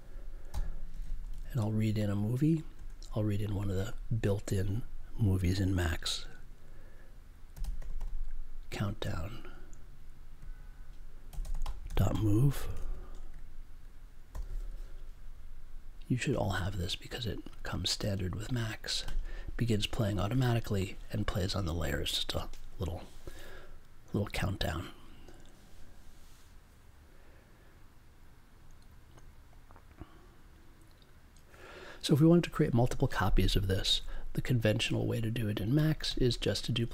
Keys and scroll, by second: 0.5 m, 2.3 d, 2.7 space, 7.5 c, 10.3-12.6 typing, 14.3 super+j.